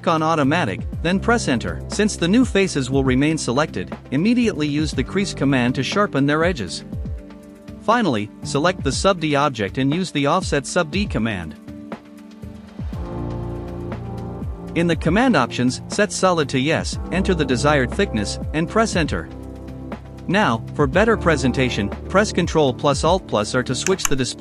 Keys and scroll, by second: 2.6-4.6 typing, 9.3-11.8 typing, 18.4 KP_1, 18.7 Return.